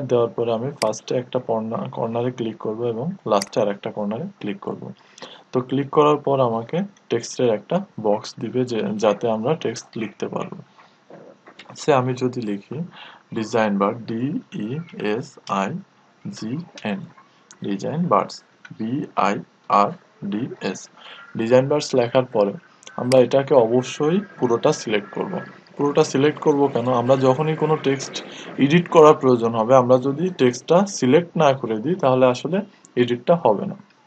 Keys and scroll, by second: 0.7 typing.